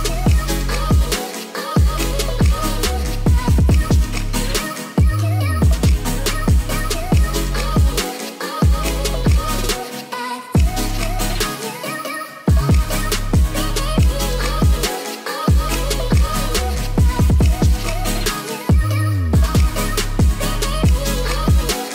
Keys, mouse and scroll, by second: 0.0 shift+z, 1.0 click, 2.0 shift+click, 2.2-3.3 shift+drag, 4.1 shift+z, 4.7 g, 4.8 y, 5.3 x, 6.6 click, 7.5 g, 7.6 z, 8.7 click, 9.8 g, 9.8 z, 10.8 click, 11.0 Tab, 11.2 drag, 11.4 middle drag, 11.7 shift+middle click, 11.9 middle click, 13.0 Tab, 13.0 click, 13.4 middle click, 14.0 1, 14.1 click, 14.4 g, 14.6 z, 15.1 click, 15.3 Tab, 15.4 middle drag, 15.9 click, 16.2 click, 17.0 s, 17.1 z, 18.0 s, 18.1 z, 18.6 middle drag, 19.0 click, 19.1-19.7 middle drag, 20.1 ctrl+s, 20.2 drag, 20.5 drag, 21.0 click, 21.5 KP_1.